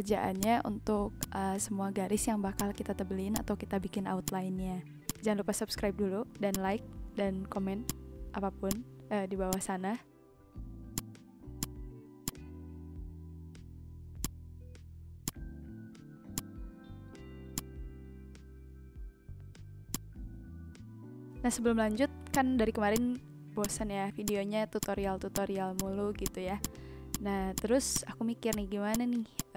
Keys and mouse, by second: 0.1 ctrl+z, 0.4 click, 1.1 click, 2.5 click, 3.0 ctrl+z, 3.3 click, 4.2 click, 4.7 ctrl+z, 5.0 click, 6.2 ctrl+z, 6.5 click, 7.8 click, 8.6 click, 9.4 click, 10.4 click, 10.9 click, 14.2 click, 15.2 click, 16.3 click, 17.1 ctrl+z, 17.5 click, 19.8 click, 22.3 click, 23.4 ctrl+z, 23.6 click, 24.2 click.